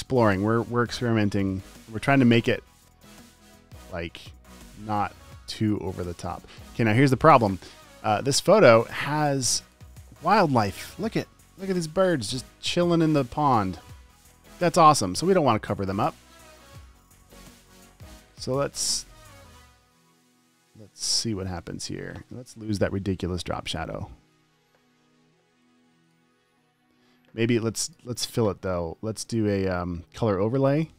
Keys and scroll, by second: 8.2 space, 8.7 super+space, 12.5 space, 16.4 super+t, 21.7 v, 24.8 v.